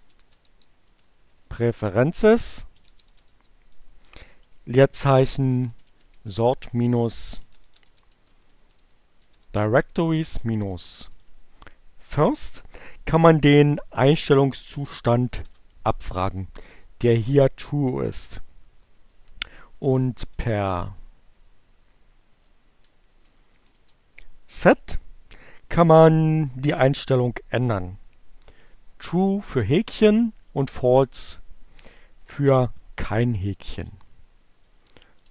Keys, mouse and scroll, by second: 1.1-2.4 typing, 3.8-4.7 typing, 6.0-10.1 typing, 14.0 Return, 19.1 Up, 20.3 Left, 22.9 Right, 23.1 Delete, 23.8 s, 26.9 Right, 31.9 Right, 32.4 space, 34.3-35.3 typing.